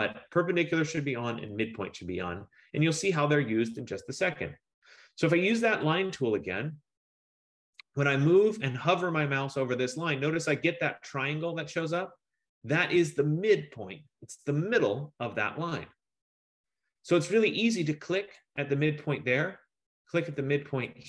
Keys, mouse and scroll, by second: 3.3 click, 6.2 click, 18.6 click.